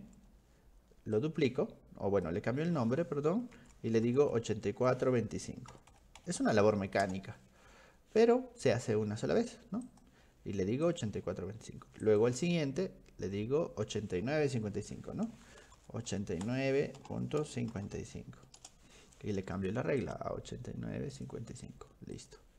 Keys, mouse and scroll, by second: 1.2-2.3 drag, 4.1 ctrl+shift+Left, 4.3 ctrl+shift+Left, 9.9 click, 10.9 click, 12.0 click, 15.8 ctrl+shift+Left, 17.7 5, 17.9 5, 18.6 Return, 20.0 click, 21.1 click, 22.2 click.